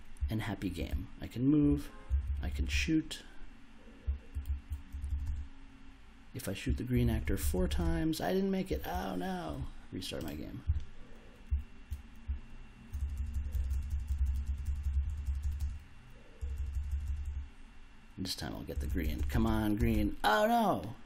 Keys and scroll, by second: 0.2 s, 0.9 w, 1.7 s, 2.1 space, 4.0 s, 4.4 w, 4.8 space, 6.6-8.6 typing, 11.5-15.0 typing, 18.7 space.